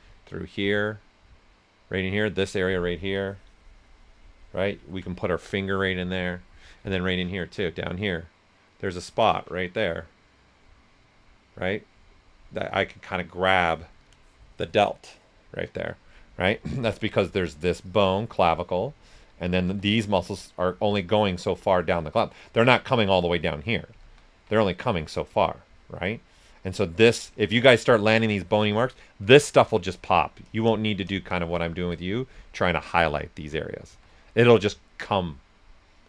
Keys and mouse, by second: 3.0 alt+click, 3.0 typing, 3.1-7.6 alt+drag, 16.4 right click, 16.4 typing, 17.7-19.4 drag, 19.6 s, 19.7 click, 24.0 ctrl+z, 24.9 click, 25.2 s, 25.3 click, 27.7 shift+click, 29.7 shift+click, 31.9 right click, 33.8 s, 33.9-36.0 drag.